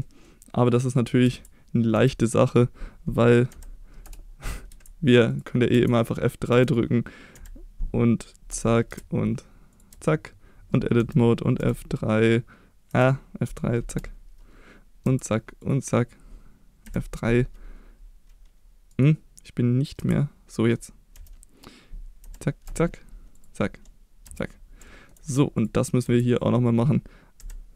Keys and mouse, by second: 0.0 middle drag, 1.3 Tab, 1.9 a, 3.5 F3, 4.7 Tab, 5.3 click, 5.7 Tab, 6.5 a, 7.4 F3, 8.9 Tab, 8.9 \, 9.9 Tab, 11.0 a, 11.6 F4, 12.9 F3, 15.1 Tab, 15.6 click, 16.9 F3, 20.0 Tab, 21.1 a, 22.2 F3, 24.3 Tab, 24.9 shift+middle click, 25.6 click, 26.0 Tab, 27.4 F3.